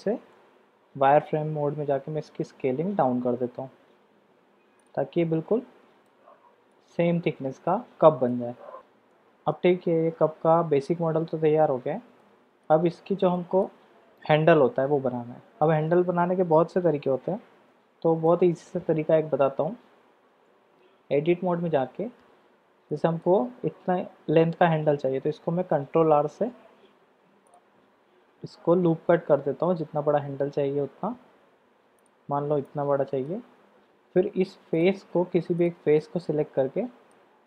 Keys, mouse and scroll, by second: 0.7 shift+z, 1.9 s, 5.2-6.1 drag, 6.3 shift+z, 6.7-8.3 middle drag, 9.1 middle click, 12.2-12.7 middle drag, 13.3 shift+middle drag, 18.3 middle click, 20.4 Tab, 22.9 middle click, 25.9 ctrl+r, 32.7 click, 34.7 click, 36.0-37.2 drag.